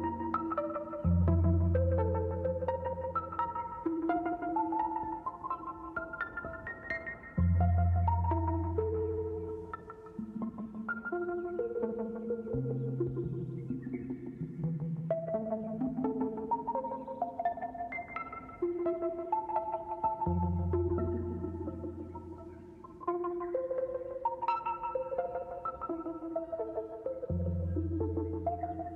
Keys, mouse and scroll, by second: 0.4-0.7 middle drag, 1.1-1.5 scroll up 2, 1.7 shift+middle click, 2.5 click, 3.0 x, 4.3 shift+a, 6.0 x, 6.5 x, 14.9 shift+a, 18.7 scroll up 1, 19.7-20.6 scroll up 1, 20.7 shift+a, 24.4 click, 24.9-28.9 drag, 25.2 middle click, 27.2 middle click.